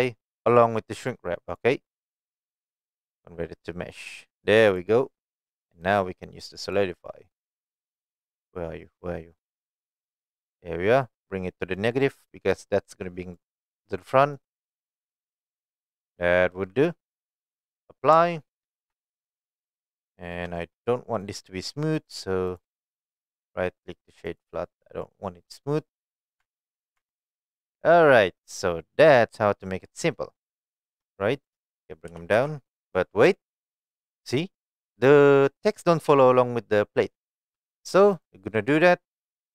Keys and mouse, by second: 0.0 right drag, 1.9 click, 5.8 click, 6.8-9.8 drag, 11.7 click, 12.3 click, 13.4-14.3 middle drag, 15.0-15.5 middle drag, 18.6 ctrl+a, 19.3 middle click, 20.1 shift+middle click, 20.6 middle click, 21.9 click, 22.5 click, 23.0 right click, 23.3-24.4 right drag, 25.0-26.2 middle drag, 26.4 Tab, 26.6 click, 27.0 Tab, 27.4-27.8 middle drag, 28.3-29.4 middle drag, 29.7 middle click, 30.7 shift+middle drag, 31.3 click, 32.1 g, 32.3 z, 37.5 right click, 38.1 click, 38.8 click.